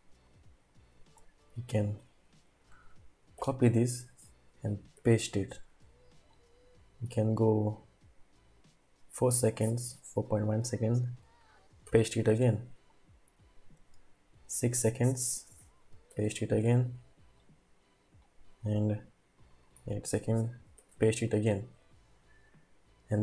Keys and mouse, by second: 1.1-2.1 drag, 3.3 ctrl+c, 5.0 ctrl+v, 6.3-7.9 drag, 11.9 ctrl+v, 12.9-15.0 drag, 16.1 ctrl+v, 16.7-17.8 drag, 18.4-20.0 drag, 20.8 ctrl+v.